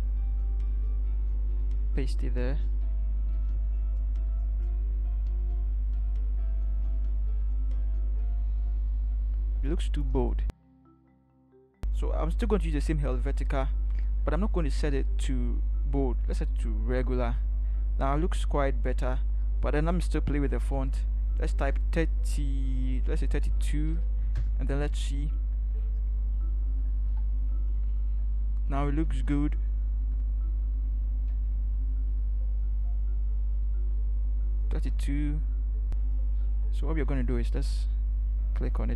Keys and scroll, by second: 1.6 ctrl+v, 3.3 v, 21.6 3, 23.4 2, 24.3 Return, 27.0 ctrl+-, 29.1 ctrl+t, 31.3 shift+Right, 31.6 shift+Right, 32.0 shift+Right, 34.7 Return, 37.3 ctrl+t.